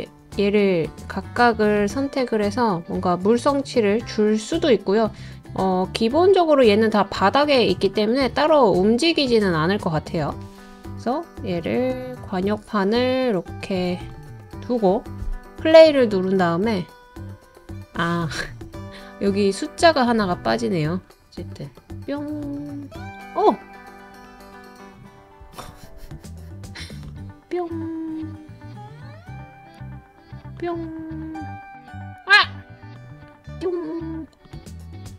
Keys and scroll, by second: 21.1 space.